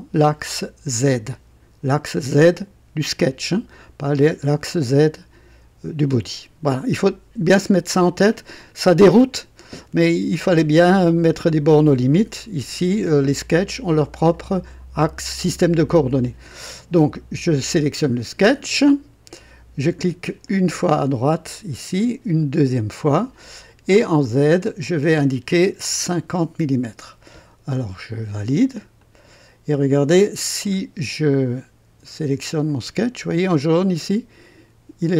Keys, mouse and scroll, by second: 20.4 click, 22.4 click, 24.2 click, 25.9 KP_5, 26.4 KP_0, 29.0 click, 30.6 click, 34.0 right click.